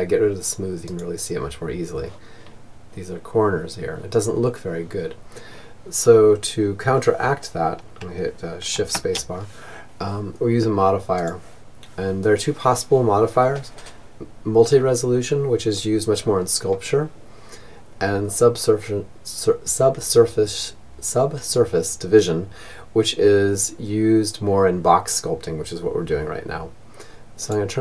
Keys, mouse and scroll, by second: 7.3 shift+space, 10.4 click.